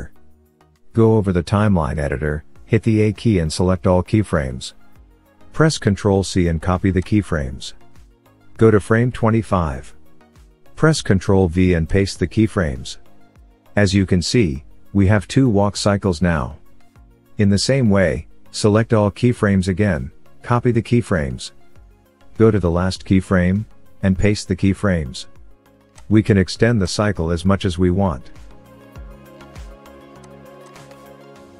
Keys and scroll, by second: 2.6 a, 5.4 ctrl+c, 10.4 ctrl+v, 13.9 space, 16.0 space, 17.6 a, 19.9 ctrl+c, 23.5 ctrl+v.